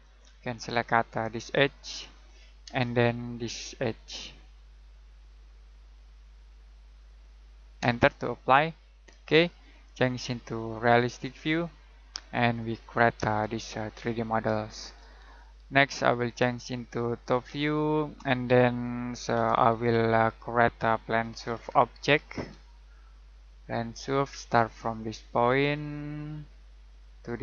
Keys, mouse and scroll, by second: 0.2-1.5 scroll up 1, 1.5 click, 2.6 space, 7.0 click, 7.8 space, 8.8-10.5 scroll down 1, 10.5 click, 12.6-13.2 scroll down 1, 13.3 shift+middle click, 16.3 click, 19.3 F7, 19.6-21.3 scroll down 1, 21.1-22.8 typing, 24.0 click, 26.3-26.8 scroll down 1, 26.8 click.